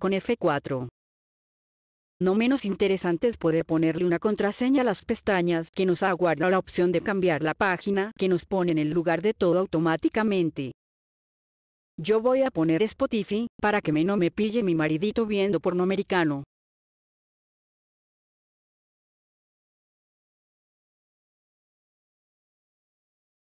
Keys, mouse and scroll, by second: 2.1 click, 2.8 click, 4.9 click, 5.6 click, 6.2 click, 7.5-7.8 typing, 8.2 click, 10.3 scroll down 2, 14.6 click, 15.4 click, 16.3 ctrl+click, 16.5 click, 16.7 click, 17.8 click, 18.8 click, 19.0 click, 19.3 click, 19.6 click, 19.9 click, 20.1 click, 20.3 click, 21.3 v, 22.2 click.